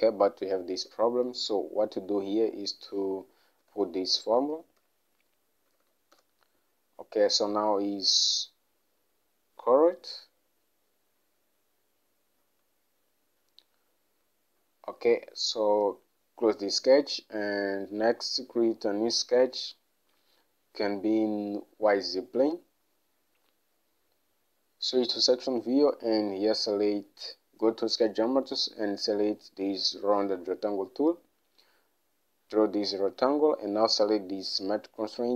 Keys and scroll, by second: 1.0 Escape, 3.8-5.9 typing, 6.3 Return.